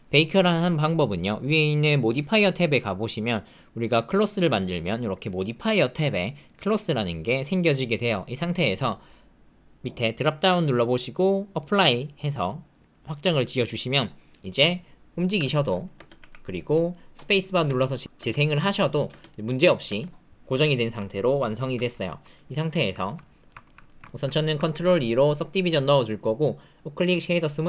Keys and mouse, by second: 10.2-12.9 drag, 14.5 click, 15.3 space, 15.9 space, 16.1 g, 17.6-20.5 typing, 19.3 click, 21.0 alt+click, 22.0 shift+click, 22.9 ctrl+click, 23.4 ctrl+shift+click, 23.8 shift+click, 24.0 ctrl+click, 24.7 ctrl+2, 26.3 click.